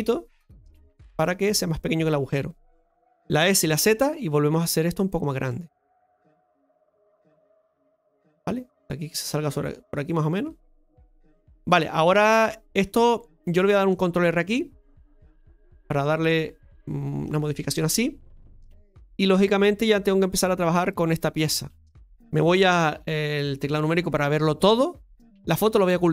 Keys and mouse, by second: 1.4-2.8 middle drag, 5.4 middle click, 6.6 click, 7.5 middle click, 9.2-10.7 drag, 10.7-11.8 middle drag, 13.4 middle click, 18.8 shift+middle click, 19.2-20.2 drag, 20.7 right click, 21.1 alt+shift+right click, 22.8 KP_Divide, 24.7 middle click.